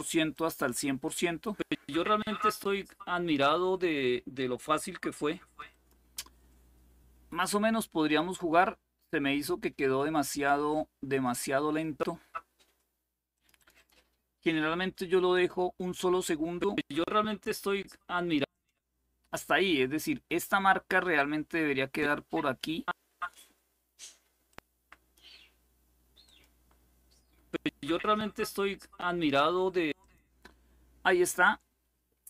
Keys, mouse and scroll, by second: 0.0 click, 5.4 click, 11.0 click, 13.0 click, 15.0 click, 18.2 click, 20.8-23.6 drag, 24.2 click, 25.9 click, 29.7 click.